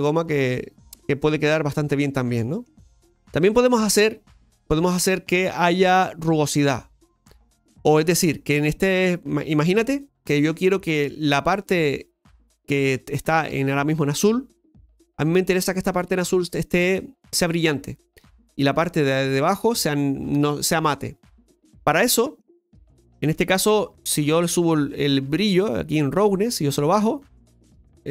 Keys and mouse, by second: 23.1 middle click, 24.4-24.7 middle drag, 26.5-27.6 drag.